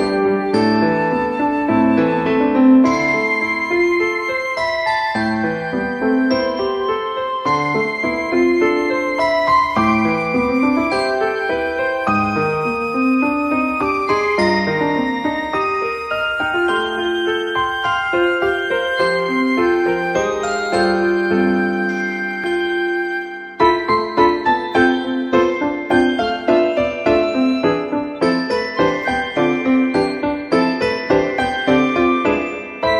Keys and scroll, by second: 1.6 F3, 15.8 F3, 20.2 F3.